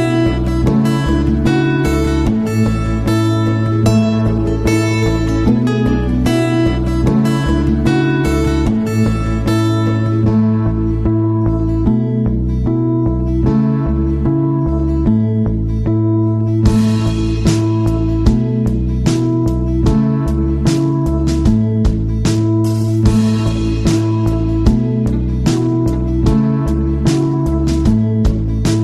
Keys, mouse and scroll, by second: 9.6 click, 15.1 click, 17.5-27.9 drag.